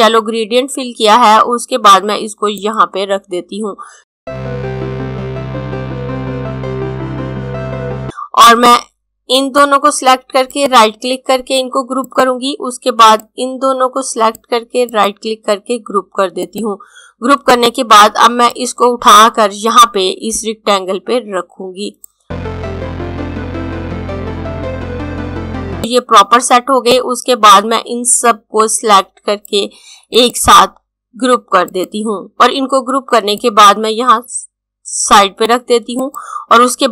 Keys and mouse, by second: 4.2 click, 5.6 click, 7.0 click, 7.6 click, 10.4 right click, 11.9 click, 14.8 right click, 16.1 click, 22.6 click, 23.4 click, 24.1 click, 24.5 click, 30.0 right click, 31.4 click.